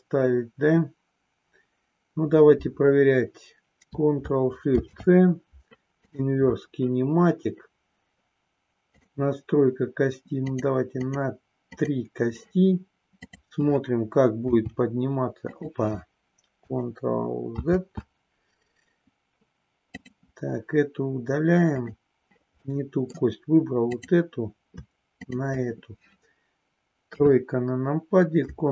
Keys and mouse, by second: 6.1 ctrl+shift+c, 8.8 click, 10.4 click, 11.1 click, 11.8 click, 14.5 g, 15.5 click, 17.6 ctrl+z, 21.7 click, 22.6 middle click, 25.1 shift+click, 27.1 KP_3.